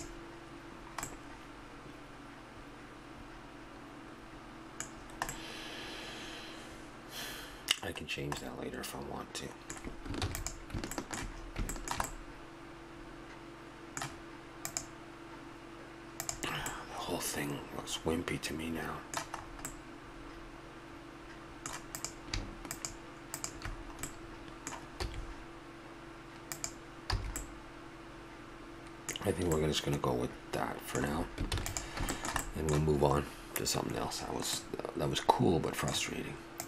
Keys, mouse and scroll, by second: 0.7-4.4 middle drag, 5.0-6.3 middle drag, 6.8-9.3 middle drag, 10.2 ctrl+s, 11.0-12.1 middle drag, 16.7-18.6 middle drag, 19.3-21.0 middle drag, 21.4 middle click, 22.0-24.1 right drag, 24.1-25.9 middle drag, 25.0 s, 27.1 a, 27.4-27.9 middle drag, 28.0 middle drag, 28.1 middle drag, 28.9-29.7 middle drag, 31.5 ctrl+s, 34.3 middle click, 36.3 middle click.